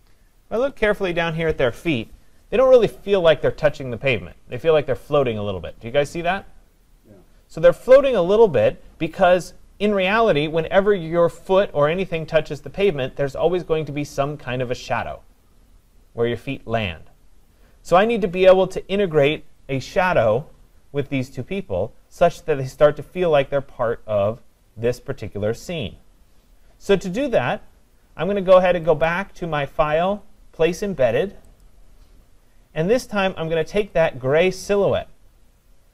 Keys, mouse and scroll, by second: 0.2-1.4 scroll, 0.6 click, 1.4 scroll, 20.2-21.9 scroll, 21.9-23.0 scroll, 23.0-26.2 scroll, 29.0 click, 31.6 click, 34.1 click.